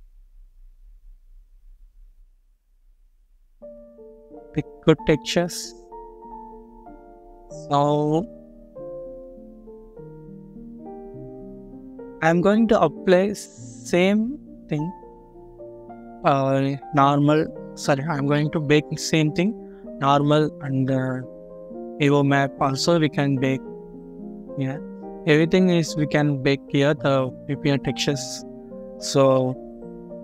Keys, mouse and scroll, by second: 1.7 scroll up 1, 3.3 scroll down 1, 29.5-29.8 scroll down 1.